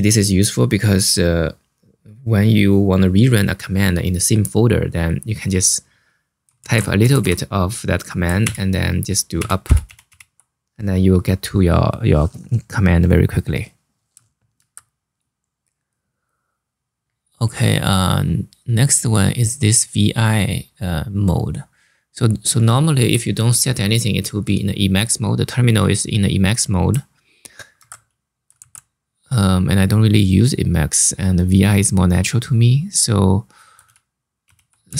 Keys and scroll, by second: 6.3 ctrl+c, 6.6-7.4 typing, 8.1 Up, 9.3 Up, 9.5 Up, 9.8 Up, 14.3 super+Tab, 27.5 super+Tab, 28.3 ctrl+c, 33.5 Up, 34.1 Down, 34.3-34.9 typing.